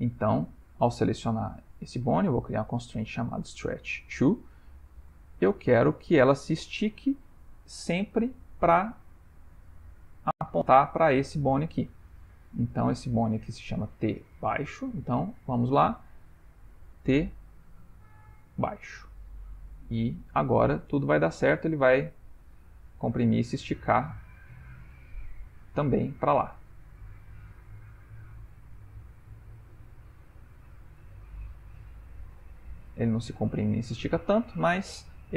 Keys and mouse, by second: 2.0 click, 4.9 click, 8.3 middle click, 13.4 click, 15.2 click, 16.5 click, 19.5 ctrl+middle click, 20.6 click, 21.0 g, 35.1 ctrl+middle click.